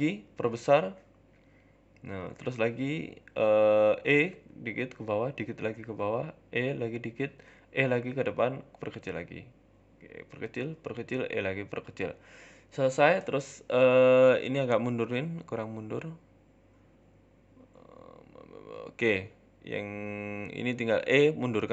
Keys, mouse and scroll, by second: 16.6 shift+middle click, 16.6-17.2 scroll up 5, 17.2 scroll up 1, 17.5 shift+middle click, 18.3 shift+middle click, 19.0 middle click, 19.2-20.0 scroll down 3, 19.4 Tab, 20.0 Tab, 20.5 click, 21.0 right click, 21.2 middle click.